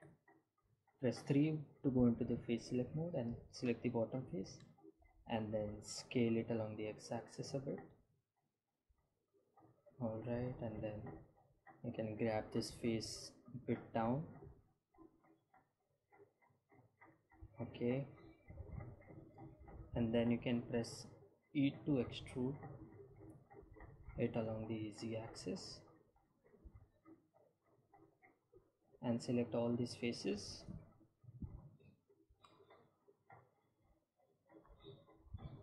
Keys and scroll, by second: 2.2 3, 7.9 s, 8.1 x, 14.1 g, 14.3 z, 24.1 e, 25.2 z.